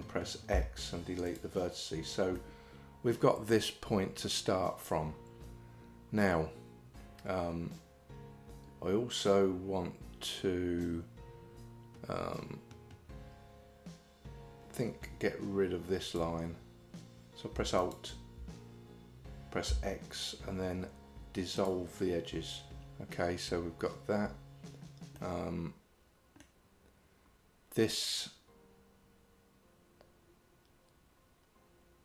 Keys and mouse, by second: 0.6 x, 2.4 middle click, 16.1 click, 17.8 alt+click, 19.7 x, 25.2-26.4 middle drag.